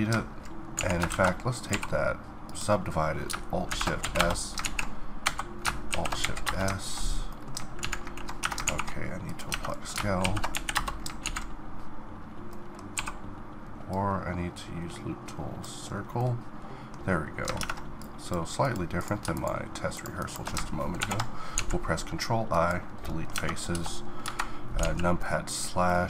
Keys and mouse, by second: 0.7 a, 1.7 w, 3.7 alt+shift+s, 5.9 alt+shift+s, 7.3 click, 7.8 ctrl+z, 8.4 Tab, 8.6 ctrl+a, 9.5 Tab, 10.2 alt+shift+s, 11.2 ctrl+z, 12.5 middle click, 12.9 w, 14.9-16.2 drag, 17.3 middle click, 17.6 ctrl+Tab, 19.0-21.0 drag, 21.0 ctrl+i, 21.5 x, 22.7 middle click, 23.3 Tab, 24.2 KP_Divide, 24.8 z, 25.8 middle click.